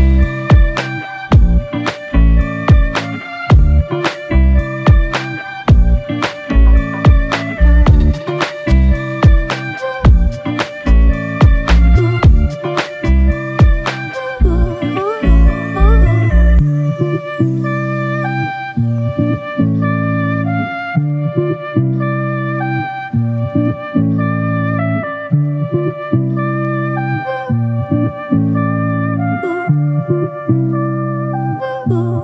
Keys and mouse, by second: 0.3 double click, 8.2 shift+click, 9.4 shift+click, 10.3 shift+click, 11.0 double click, 11.9 shift+click, 13.6 double click, 17.7 shift+click, 18.7 shift+double click, 18.8 shift+click, 20.7 alt+click, 22.4 shift+click, 23.7 alt+shift+click, 27.9 ctrl+alt+click, 29.0 alt+shift+click.